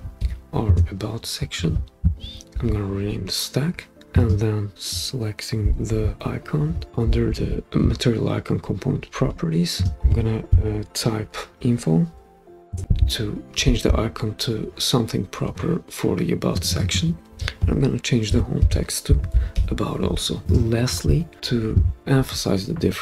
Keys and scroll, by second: 0.0-0.7 typing, 2.2 typing, 11.9-12.6 typing, 12.7 Return, 18.1-20.0 typing.